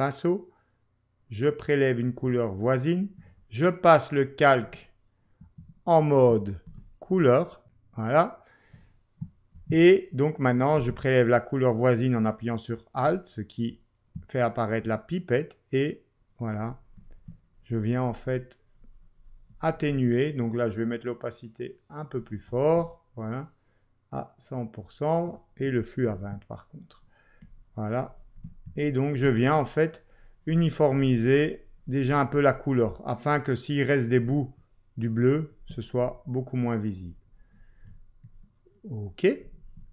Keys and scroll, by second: 9.7 ctrl+Left, 26.1 shift+2.